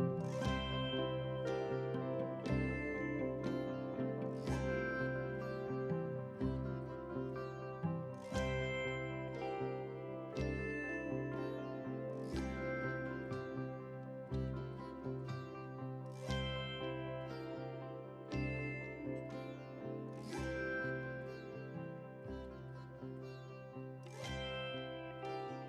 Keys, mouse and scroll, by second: 7.7 KP_1, 8.1 KP_0, 9.7 click, 9.9 click, 19.8 alt+scroll up 1, 20.7 alt+scroll down 1, 21.4-21.9 alt+scroll down 1, 21.9 click.